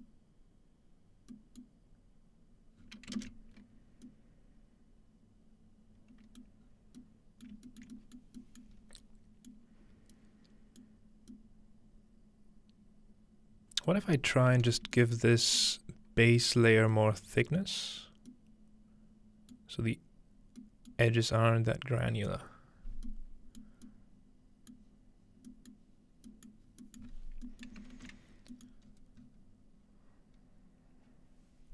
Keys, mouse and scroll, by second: 0.0-3.5 middle drag, 2.8-4.1 scroll down 1, 4.1-4.7 middle drag, 6.6 middle click, 6.6-8.2 scroll down 3, 7.5 shift+middle click, 7.9 shift+middle click, 8.4 shift+middle click, 8.7 shift+middle click, 8.8-10.8 scroll up 1, 9.5 middle click, 10.9 middle click, 11.0-13.7 scroll down 2, 14.8 shift+middle click, 15.3 shift+middle click, 15.7-16.9 shift+middle drag, 15.8-16.8 scroll up 1, 17.5-18.3 middle drag, 19.6-20.6 middle drag, 21.0-22.5 middle drag, 22.4-23.6 scroll down 1, 24.9 middle click, 25.9-26.3 middle drag, 26.1-27.1 scroll down 1, 26.5 middle click, 27.0 middle click, 27.1 scroll up 2, 28.3 scroll down 2, 28.9 scroll up 2, 29.0 scroll down 1, 29.2 scroll up 1.